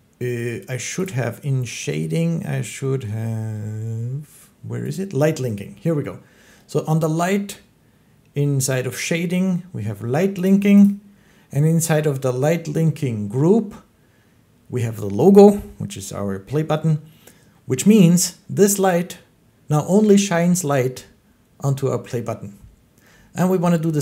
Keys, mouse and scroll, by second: 0.9 click, 4.8 click, 10.3 click, 10.7 click.